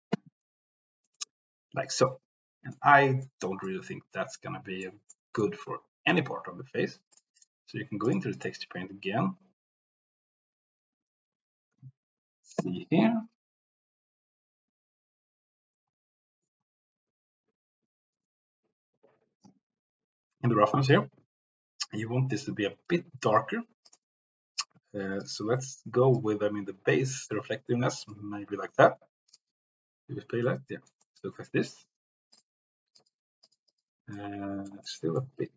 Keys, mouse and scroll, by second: 2.1-2.8 drag, 3.0 click, 3.6-4.9 drag, 5.1 click, 23.8 click, 29.3 click, 30.4 middle click, 31.2 middle click, 32.3 click, 32.9 click, 33.5 click, 33.8 click, 34.3 middle click, 34.8 middle click.